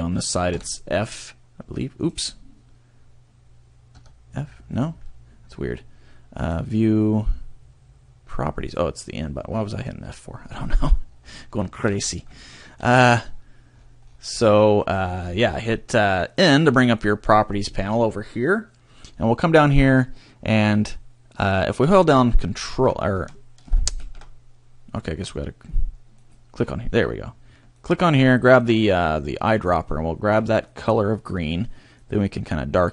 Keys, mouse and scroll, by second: 0.5 f, 2.2 right click, 3.9 f, 5.0 right click, 6.3 click, 11.4 shift+middle click, 12.0-12.3 scroll up 2, 12.4 shift+middle click, 13.3-13.7 scroll up 1, 13.7-14.4 scroll down 1, 15.0 scroll up 1, 16.6 click, 17.0 click, 18.3-18.7 scroll up 1, 19.1 scroll down 1, 24.9 click, 26.1 click, 27.8 click, 31.9 click.